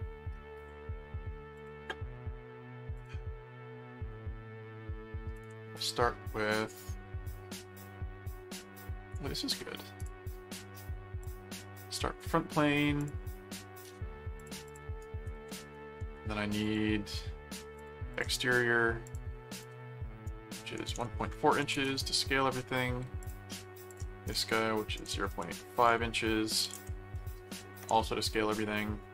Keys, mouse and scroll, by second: 1.5 click, 2.9 click, 5.3 click, 10.0 click, 11.2 click, 13.0 click, 14.4 click, 15.0 right click, 16.6 click, 17.8 click, 18.4 right click, 19.0 click, 21.3-22.1 typing, 23.2 click, 23.9 click, 26.3-27.1 typing.